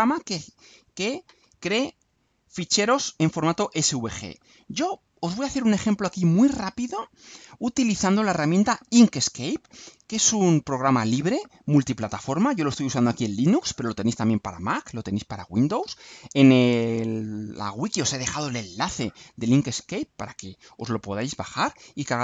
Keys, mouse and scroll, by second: 4.8 click, 9.2 scroll up 2, 10.0 scroll down 3, 10.3 ctrl+scroll up 2, 10.8 ctrl+right click, 11.6 click, 12.4-14.0 middle drag.